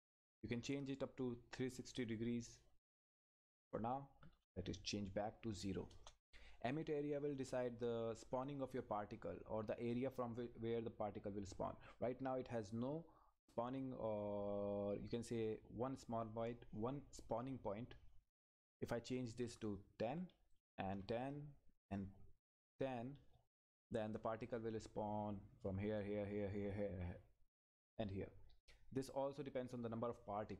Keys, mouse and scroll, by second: 5.9 Return, 6.7 click, 12.5-14.1 scroll up 1, 15.2 click, 18.8 click, 19.4 Left, 20.5 click, 22.7 Left, 23.5 Return.